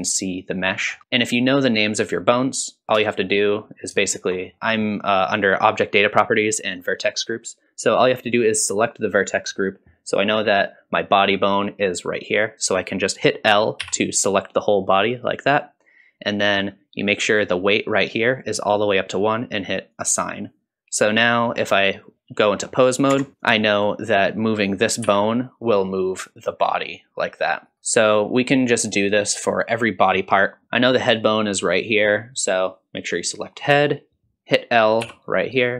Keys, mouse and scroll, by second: 0.9 scroll up 1, 1.0 alt+a, 1.0-2.5 scroll down 1, 2.8-3.3 scroll up 5, 3.3-3.9 scroll up 1, 4.1 shift+middle click, 4.5 middle click, 8.9 click, 13.8 l, 17.1-18.8 drag, 19.9 click, 21.4 scroll up 2, 21.8 middle click, 23.1 Tab, 23.4 click, 25.0 g, 27.7 g, 28.8-30.6 scroll down 2, 30.6 ctrl+a, 30.6 l, 33.2 click, 35.0 l.